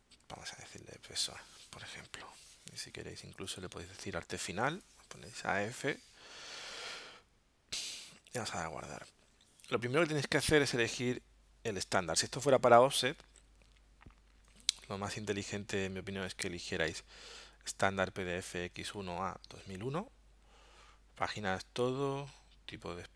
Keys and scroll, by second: 0.0-1.2 typing, 3.0-4.5 typing, 11.8 alt+super+0.